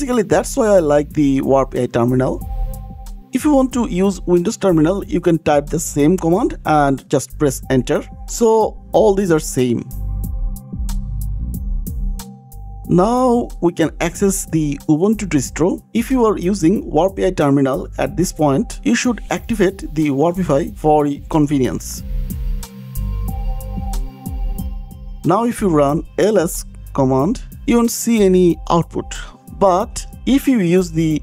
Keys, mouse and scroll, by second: 3.7 Right, 5.3 click, 6.6 click, 8.3 click, 8.7-11.5 typing, 12.6 click, 13.1 click, 14.0 KP_Enter, 22.5 click, 23.1 scroll, 23.4 click, 23.8 ctrl+shift+k, 25.5 c, 25.8 Return, 25.8 d, 27.7-28.6 typing.